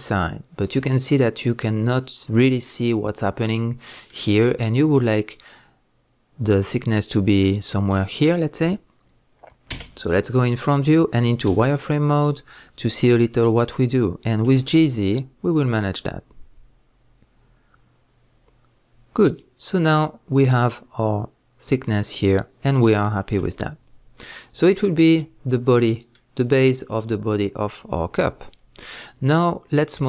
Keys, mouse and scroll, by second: 1.6 click, 2.9-19.8 middle drag, 9.7 KP_1, 11.5 z, 19.8 click, 21.7-28.3 middle drag, 23.4 z, 28.3-28.8 scroll down 2.